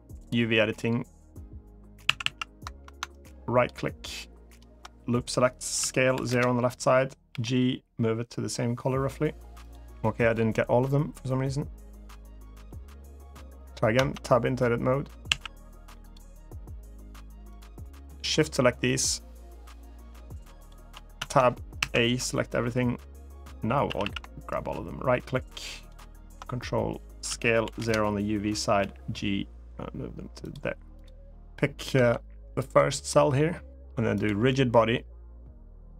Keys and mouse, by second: 0.0 Tab, 0.0 click, 1.8 a, 2.0 a, 2.9-4.4 ctrl+right drag, 5.5 s, 5.9 0, 6.1 Return, 7.1 g, 13.7 Tab, 15.0 a, 17.3-18.1 drag, 20.4 shift+click, 21.0 Tab, 21.6 a, 23.6 a, 23.8 a, 24.3-25.7 ctrl+right drag, 27.0 s, 27.4 0, 27.6 Return, 28.5 g, 30.2 click, 31.7 Tab, 32.2 click, 32.5 click, 32.8 middle click, 33.5 middle click, 33.9 click.